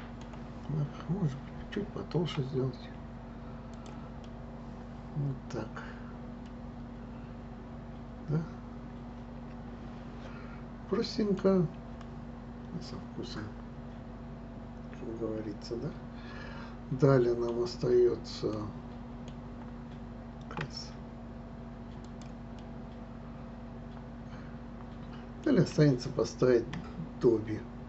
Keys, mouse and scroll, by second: 2.3 s, 4.2-7.2 middle drag, 11.4 scroll up 1, 12.0-15.0 middle drag, 17.3 middle click, 17.9 scroll up 1, 18.5-20.6 middle drag, 20.6 s, 22.5-25.5 middle drag.